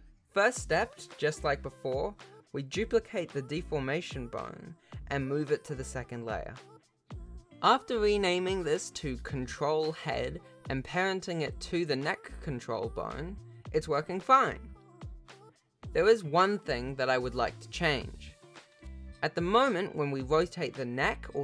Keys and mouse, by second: 0.0 ctrl+s, 0.0 shift+middle click, 1.1 Tab, 2.4 alt+h, 2.6 alt+a, 3.5 shift+d, 5.6 m, 7.5 click, 8.2 shift+click, 9.1 ctrl+p, 10.1 alt+a, 10.6 ctrl+Tab, 11.2 click, 12.4 r, 13.9 r, 15.5 shift+click, 18.3 click, 18.8 Tab, 19.1 click, 19.5 s.